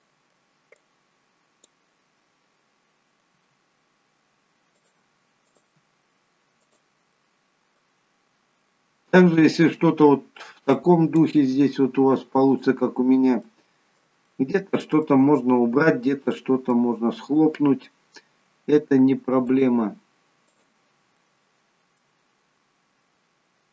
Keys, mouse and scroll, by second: 0.7 click, 3.3 g, 5.5 click, 5.7 g, 7.2 middle click, 8.2-9.2 scroll up 2, 9.2 middle click, 10.6 click, 11.4 g, 13.4 middle click, 14.2 middle click, 16.3 middle click, 18.6 k, 21.1 middle click.